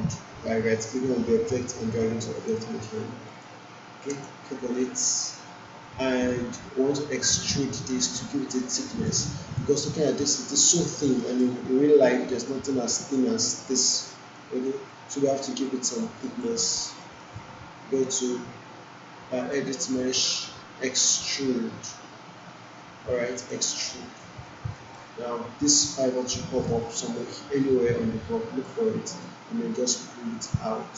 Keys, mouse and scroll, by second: 3.2 click, 4.7 alt+middle click, 7.2 click, 9.6 alt+click, 10.2 alt+middle click, 10.4 alt+right click, 10.9 alt+middle click, 11.4 alt+right click, 12.1-12.7 alt+drag, 14.3 alt+click, 14.8 alt+right click, 15.2 alt+middle click, 15.6 alt+right click, 16.2 alt+click, 16.6 alt+right click, 17.0 alt+middle click, 23.3 click, 24.7 alt+middle click, 26.7-28.8 alt+drag, 29.9-30.9 drag.